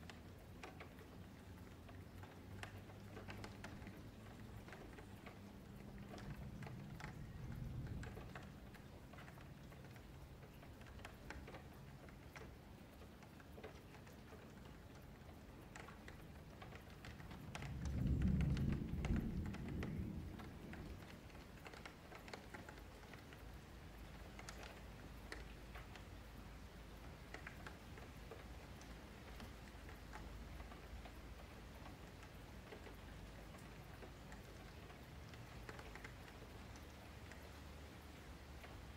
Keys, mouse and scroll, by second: 0.0 m, 1.3-2.3 shift+middle drag, 2.3 Tab, 3.1 alt+q, 3.5 alt+q, 3.7-4.0 middle drag, 4.0 click, 4.3 scroll up 2, 4.4 Tab, 4.9-6.0 middle drag, 6.0 F3, 6.2 middle click, 6.8-9.2 middle drag, 9.2 F3, 9.4 middle click, 10.3 Tab, 10.8 click, 11.6 click, 12.2 h, 12.4-12.8 middle drag, 12.8 click, 13.1 Tab, 13.4 2, 13.7 alt+click, 14.0-15.6 middle drag, 15.6 f, 16.0-17.5 middle drag, 17.5 Tab, 18.2 alt+h, 18.5-19.7 middle drag, 19.7 Tab, 19.9-20.9 middle drag, 20.9 ,, 22.2-23.6 middle drag, 23.6 click, 25.5-27.7 middle drag, 27.7 F3, 28.1-29.3 middle drag, 29.3 scroll down 1, 29.6-32.0 shift+middle drag, 32.0 s, 33.6-34.4 scroll down 1, 34.4 ., 36.7 s, 38.4 scroll down 3, 38.5 middle click.